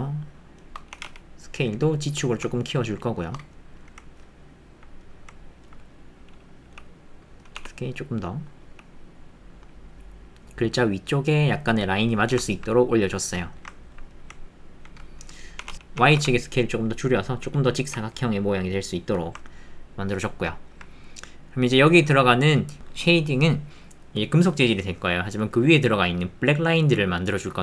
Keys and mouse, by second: 0.9 s, 1.0 z, 3.5 middle click, 4.1 alt+click, 5.0 alt+click, 12.5 ctrl+click, 12.7 click, 13.7 ctrl+middle click, 14.1 middle click, 19.4-20.7 ctrl+middle drag, 21.2 click.